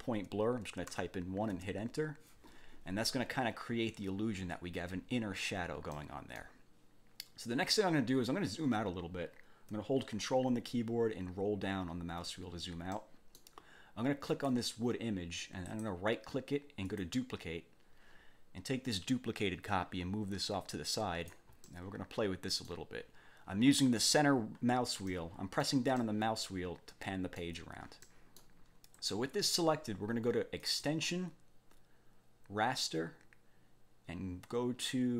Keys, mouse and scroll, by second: 0.9 1, 5.9 middle click, 11.6 ctrl+scroll down 2, 12.9 click, 14.3 click, 15.7 click, 16.8 click, 19.0-21.5 drag, 21.6 middle click, 21.9 click, 22.1 middle click, 25.1 middle click, 25.7 click, 26.0 middle click, 26.4-27.6 drag, 28.1 click, 28.9 click, 30.6 click.